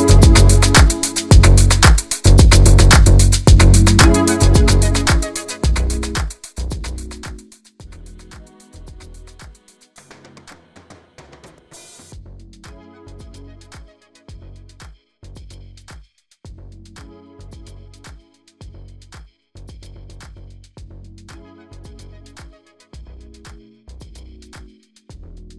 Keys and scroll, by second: 18.1 v, 22.2 ctrl+alt+shift+Left, 23.3 shift+Return, 24.9 alt+j.